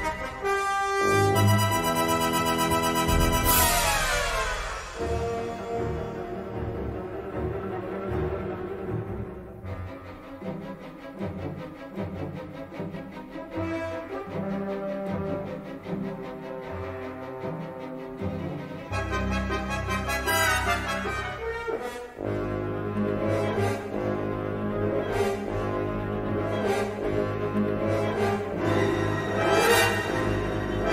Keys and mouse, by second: 1.7 middle click, 2.1 shift+middle click, 4.5 middle click, 5.0 shift+middle click, 5.8 middle click, 7.1 middle click, 8.6 middle click, 9.0 shift+middle click, 9.6 middle click, 10.6 middle click, 11.5 3, 12.1 middle click, 13.4 click, 14.4 click, 14.9 shift+click, 15.2 middle click, 16.1 g, 17.6-18.6 middle drag, 19.0 1, 19.3 click, 19.6 g, 21.4 g, 26.3 middle click, 27.3 middle click, 28.4 middle click, 29.0 shift+middle click, 30.4 KP_Decimal.